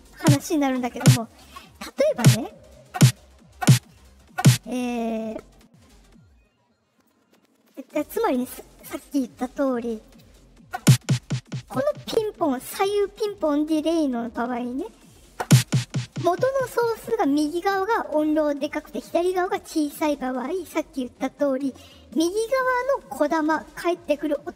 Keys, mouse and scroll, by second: 7.0 click, 7.8 right click, 8.7 click, 10.0 click.